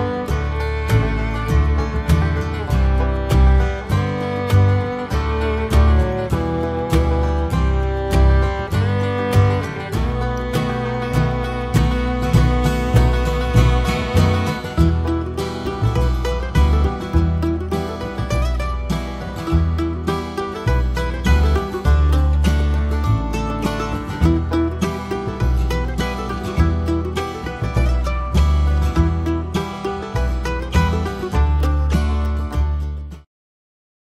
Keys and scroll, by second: 1.9 Return, 4.0 Return, 7.8 Escape, 7.9 Escape, 24.6 Escape.